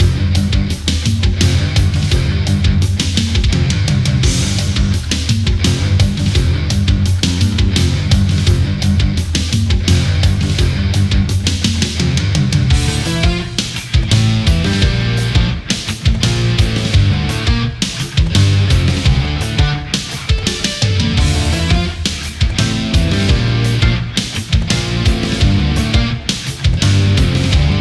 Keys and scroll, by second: 5.6 ctrl+z, 21.6 Delete, 22.2 space.